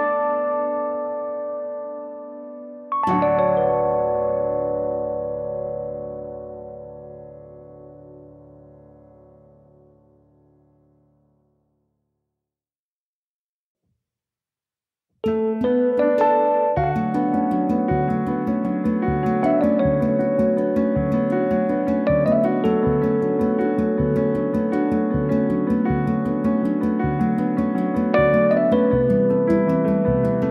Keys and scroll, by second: 9.7 ctrl+z, 14.1 l, 19.8 space.